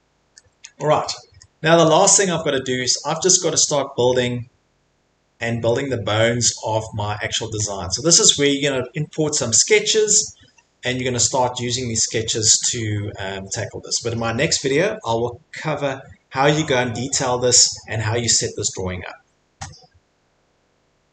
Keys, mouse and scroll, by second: 0.0 middle click, 0.6 middle click, 0.8 middle click, 1.0 middle click, 1.6 scroll, 1.9 middle click, 4.2 middle click, 5.8 middle click, 5.8 middle click, 7.6 middle click, 8.4 middle click, 9.9-10.9 scroll, 11.2-11.6 scroll, 12.3 scroll, 13.0 scroll, 13.0 middle click.